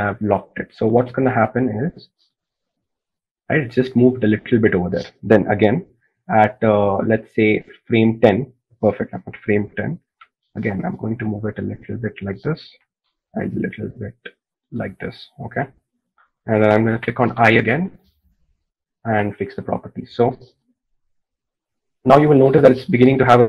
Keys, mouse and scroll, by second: 11.4 g, 18.8 i.